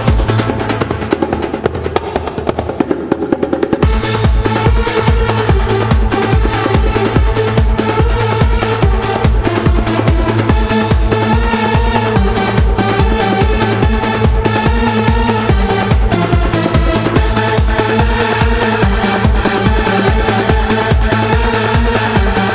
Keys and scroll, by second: 13.2 super+e, 18.6 super+j.